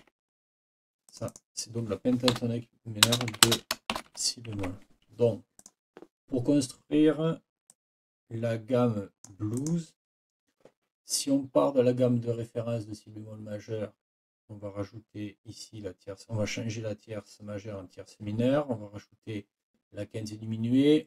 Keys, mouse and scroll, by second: 0.0 Escape, 1.1 click, 2.3 End, 3.0-3.9 typing, 4.6 shift+Escape, 5.6 click, 7.7-9.4 drag, 9.6 click.